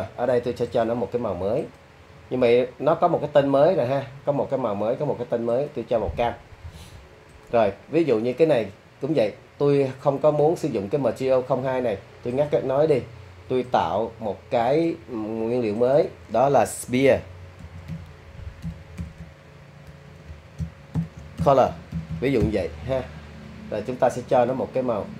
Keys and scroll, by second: 17.6-19.9 typing, 21.0-22.4 typing.